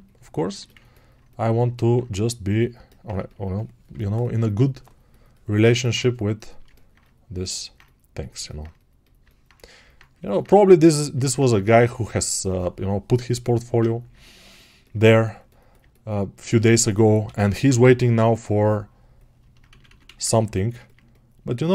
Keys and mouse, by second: 9.8-16.8 ctrl+alt+right drag.